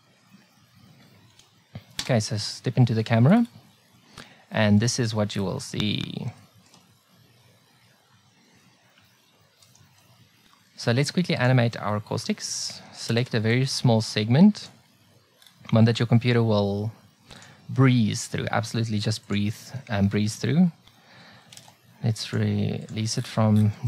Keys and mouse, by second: 11.4 click, 21.5 ctrl+n, 22.8 n, 22.8 t.